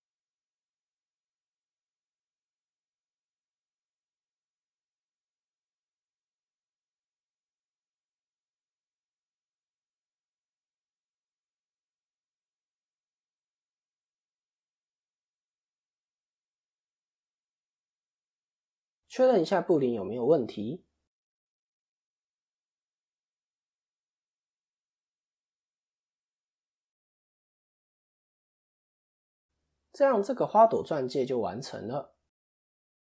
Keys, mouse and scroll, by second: 4.6 click, 11.0 click, 14.1 click, 14.1 middle click, 14.9 click, 15.7 shift+click, 15.8 shift+click, 16.8 ctrl+KP_Subtract, 17.4-17.9 scroll up 5, 17.7 middle click, 21.3 KP_3, 22.2-23.1 scroll down 2, 23.1-23.9 scroll down 3, 23.9 scroll up 3, 23.9 KP_1, 26.3 ctrl+KP_3, 27.1-27.7 scroll down 3, 27.7 middle click, 29.4 click, 31.8 click.